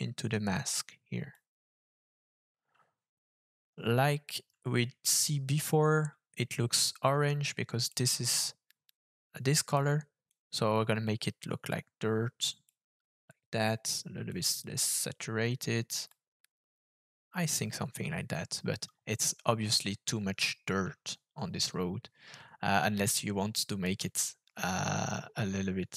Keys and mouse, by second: 7.8 click.